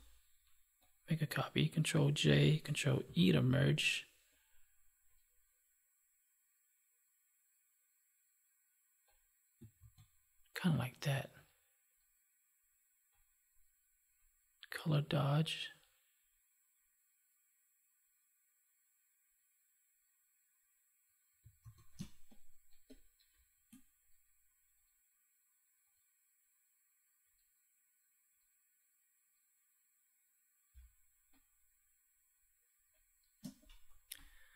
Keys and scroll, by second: 2.9 ctrl+e, 9.7 ctrl+s, 21.5 ctrl+s, 21.9 space, 30.6 space.